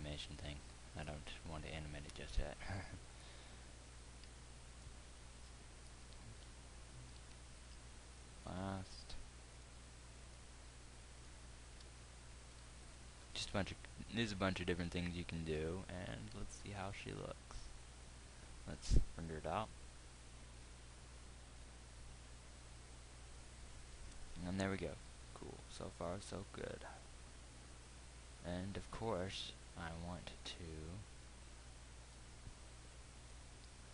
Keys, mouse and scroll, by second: 7.4 alt+m, 16.6 z, 20.1 F12, 30.6 Escape.